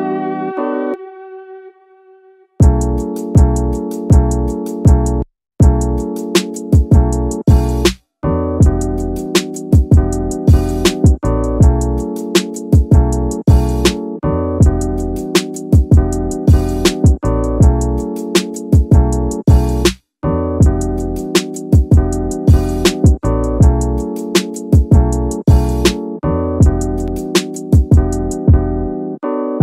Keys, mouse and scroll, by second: 0.3 scroll up 2, 1.6 alt+r, 2.6 r, 2.8 x, 3.3 KP_9, 3.5 KP_0, 4.2 click, 5.3 s, 6.7 click, 7.4-9.0 drag, 9.6 KP_3, 11.0-12.9 drag, 13.1 scroll up 1, 13.2-13.5 middle drag, 14.3 KP_1, 15.2 middle drag, 15.6 scroll up 2, 15.8 shift+middle drag, 16.3 right click, 18.0 click, 18.5-18.9 middle drag, 19.1-19.4 middle drag, 19.6-19.9 shift+middle drag, 20.0 scroll up 1, 20.1 middle click, 20.9 click, 21.2 middle click, 21.9 click, 24.0 click, 24.6 click, 25.8 click, 27.0-29.6 drag.